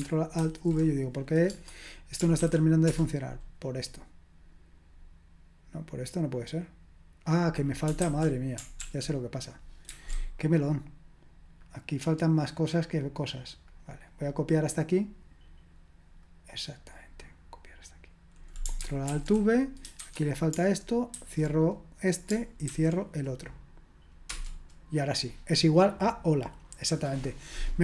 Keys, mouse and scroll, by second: 0.4 ctrl+alt+v, 2.4 }, 2.9 Return, 8.0 ctrl+c, 8.8 ctrl+p, 9.9 ctrl+c, 11.2-13.5 drag, 16.2 click, 17.0-19.1 drag, 19.1 ctrl+alt+v, 20.0 shift+', 21.2 typing, 22.7 typing.